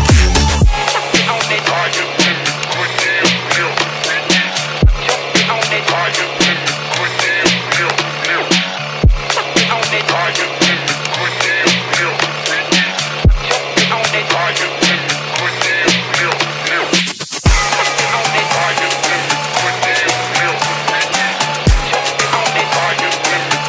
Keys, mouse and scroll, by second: 1.6-2.2 drag, 2.7 middle click, 4.1-6.3 drag, 7.5 click, 8.2 shift+d, 10.2-12.0 scroll down 1, 12.0 middle click, 12.0 scroll down 1, 13.3 click, 13.6-15.3 drag, 15.7 drag, 16.7 scroll up 1, 18.2 ctrl+middle click, 18.2 scroll up 2, 19.3-20.8 ctrl+middle drag, 21.9 click.